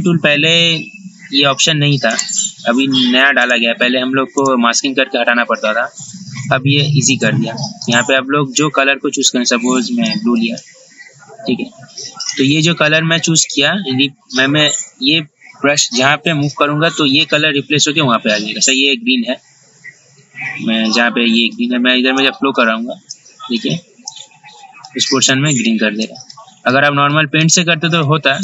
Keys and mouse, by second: 2.3 right click, 8.0-28.4 drag.